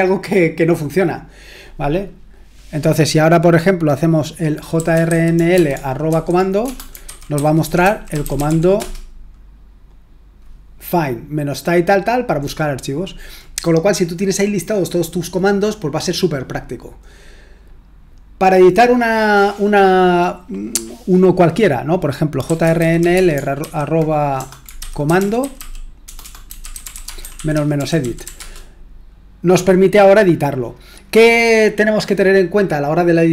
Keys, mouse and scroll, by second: 4.5-8.9 typing, 17.8-19.1 scroll down 1, 19.1-22.4 scroll down 1, 22.2-28.7 typing.